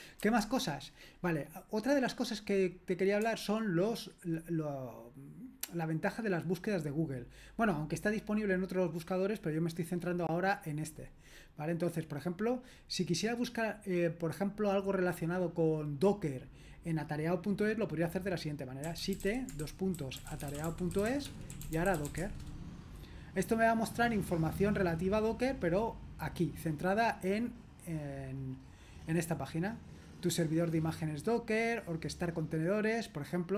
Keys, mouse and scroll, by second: 0.2 super+h, 18.6-22.6 typing.